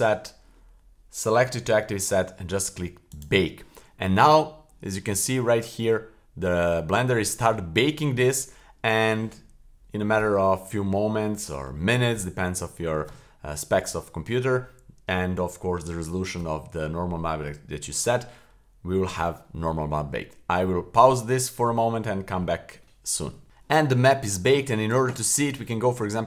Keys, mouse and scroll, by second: 3.1 click.